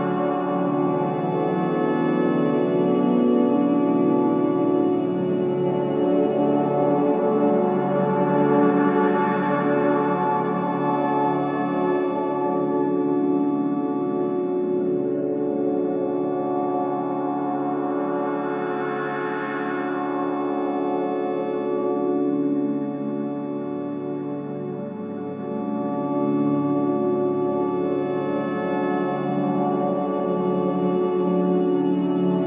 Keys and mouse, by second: 1.8-4.5 drag, 5.4 shift+click, 6.5 shift+click, 11.7 click, 13.3-16.5 drag, 21.4-24.4 drag, 25.7 click, 27.3-30.2 drag.